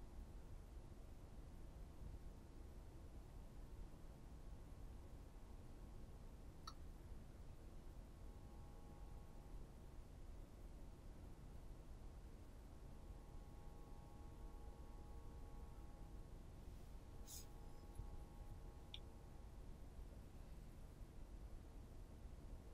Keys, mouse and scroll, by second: 0.3 Tab, 2.1 right click, 4.1 z, 4.4 right click, 5.1 right click, 5.8 b, 10.3-12.4 middle drag, 11.5 Tab, 12.4 right click, 12.9 middle click, 13.3 Tab, 13.6 right click, 13.9 alt+right click, 14.8 g, 16.1 click, 16.4-21.7 middle drag, 17.8 g, 20.1 Tab, 21.7 right click, 22.1-22.7 middle drag.